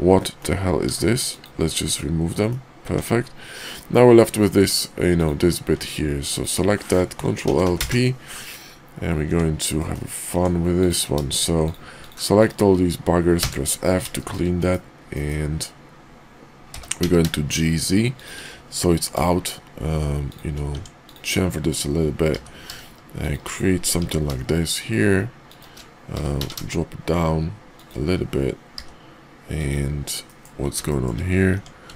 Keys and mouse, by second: 0.2 middle click, 0.8 x, 1.9 middle click, 2.8 Tab, 3.8-4.4 middle drag, 4.7 middle drag, 5.8 Tab, 6.2 click, 7.4 ctrl+l, 7.6 p, 9.2 Tab, 9.8 middle click, 10.3 Tab, 11.5 shift+click, 12.4 shift+click, 14.1 shift+click, 14.6 KP_5, 15.1 KP_5, 16.6 g, 19.0 ctrl+b, 20.6 Tab, 20.9 click, 22.3 i, 24.0 i, 26.1 g, 28.7 i, 30.2 middle click, 30.9 shift+middle click, 31.5 Tab.